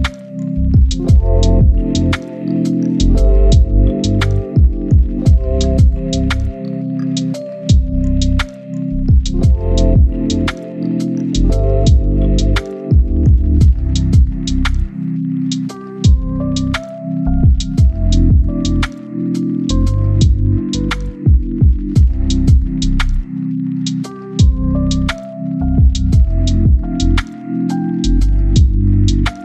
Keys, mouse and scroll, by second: 0.7 scroll down 1, 0.8-1.3 scroll up 1, 1.3 click, 2.1 right click, 2.5 click, 3.6-6.4 right drag, 6.4 scroll up 1, 6.6 click, 8.4 right click, 8.9 click, 9.1 right click, 10.2 click, 10.3 right click, 10.8 click, 10.9 right click, 11.2 click, 12.1 right click, 12.3 click, 12.5 right click, 12.9 click, 13.9 right click, 14.2 scroll down 1, 14.3-17.3 right drag, 17.3 scroll down 1, 17.4 scroll up 1, 17.5-20.6 right drag, 20.6 scroll down 1, 20.9 scroll up 1, 21.2-26.1 right drag, 26.1-26.6 scroll up 2, 26.3 right click, 26.6 click, 28.0 right click, 28.8 click.